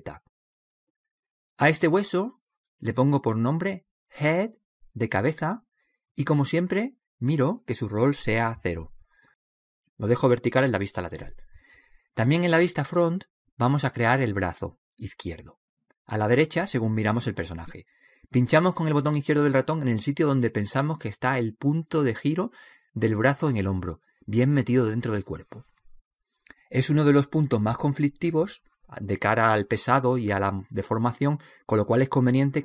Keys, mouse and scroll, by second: 2.6 right click, 3.4-4.5 middle drag, 4.5 click, 11.7 KP_3, 14.8 KP_1, 18.4-20.2 middle drag, 30.7-32.5 drag.